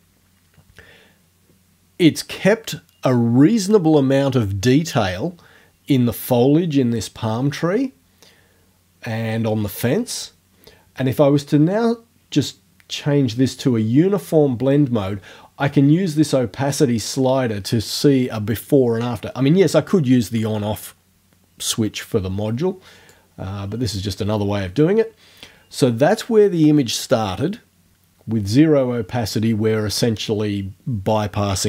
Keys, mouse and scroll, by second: 12.5 scroll down 1, 23.1-24.1 drag.